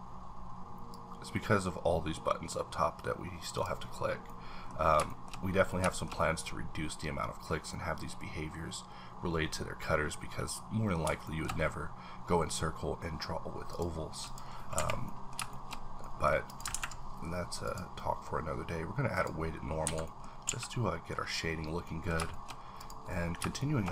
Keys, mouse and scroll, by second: 0.9-4.7 drag, 4.2 middle click, 4.7 scroll down 3, 5.0 shift+middle click, 5.5 scroll down 2, 5.9 shift+middle click, 10.5-13.7 shift+middle drag, 11.0 shift+middle click, 13.7 click, 14.2 click, 14.7 h, 15.0 middle click, 15.5 shift+middle click, 15.8 scroll down 1, 16.5 click, 16.7 ctrl+`, 17.6 click, 19.1 click, 19.8 Escape, 20.0 middle click, 20.2 scroll up 3, 20.4 a, 21.2-22.1 scroll down 5, 21.8 middle click, 22.3 shift+middle click, 22.5 scroll up 1, 22.8 click, 23.1 middle click, 23.6 shift+middle click.